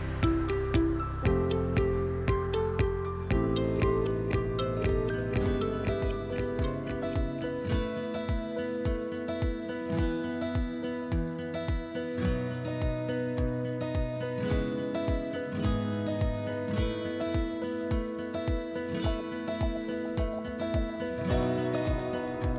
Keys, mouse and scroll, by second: 2.7 click, 3.7 click, 4.6 ctrl+click, 5.1 click, 5.7 ctrl+click, 6.4 click, 7.9 click, 11.8 click, 11.8 r, 11.8 BackSpace, 15.3 Return, 15.3 click, 16.8 typing, 18.5 click, 18.9 click, 19.6 right click, 22.4 click.